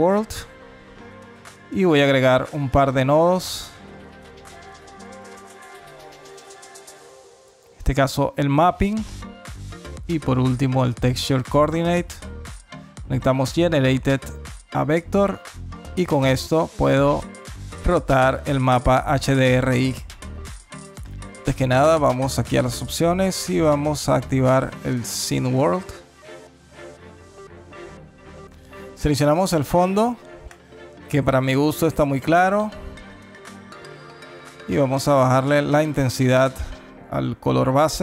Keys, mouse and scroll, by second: 0.2 middle click, 1.3 click, 1.8 click, 2.0 shift+a, 3.5 p, 6.4 click, 7.8 middle click, 8.3 click, 8.5 shift+a, 10.0 o, 13.0 click, 15.6 middle click, 16.0 scroll up 3, 17.4 click, 22.1 click, 27.7 click, 29.1 click, 31.9 middle click, 32.9 middle click, 34.3 click.